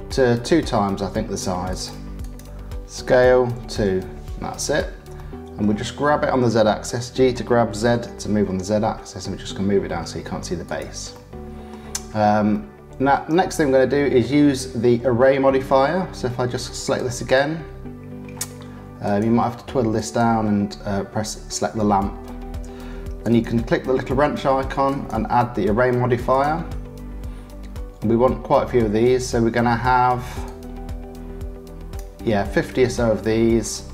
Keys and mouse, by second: 0.7 click, 1.7 click, 2.2 click, 3.1 s, 5.2 middle click, 6.9 g, 11.1 click, 12.5 shift+middle click, 13.3 middle click, 16.9 click, 19.0 click, 20.0 click, 23.2 click, 24.9-26.4 drag, 30.5-31.9 drag.